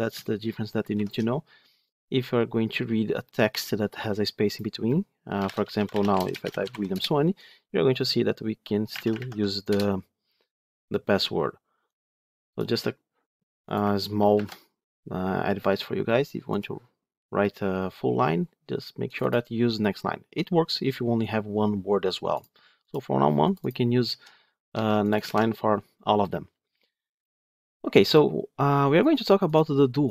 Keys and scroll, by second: 0.8 ctrl+shift+F10, 14.3 ctrl+F2, 24.6 ctrl+c, 25.1 ctrl+v.